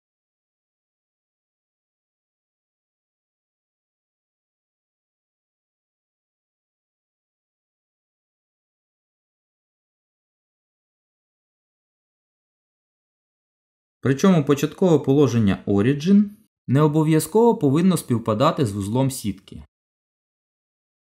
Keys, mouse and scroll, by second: 1.2 middle click, 2.3 g, 5.2 KP_7, 5.6-6.3 scroll up 4, 6.0 shift+middle click, 6.4 shift+middle click, 7.1 g, 9.9 middle click, 11.9-12.3 scroll down 1, 12.3 middle click, 19.4 g.